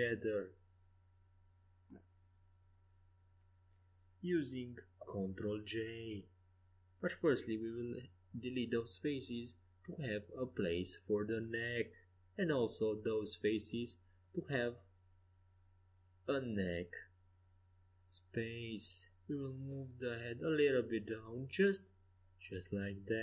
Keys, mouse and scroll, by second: 2.2 middle click, 2.3 middle click, 2.8 middle click, 4.0-6.5 right drag, 5.5 x, 7.6-9.6 middle drag, 9.7 Tab, 10.8-12.0 middle drag, 12.2 Tab, 14.9 x, 19.1 Tab, 20.3-22.1 drag, 22.1 Tab.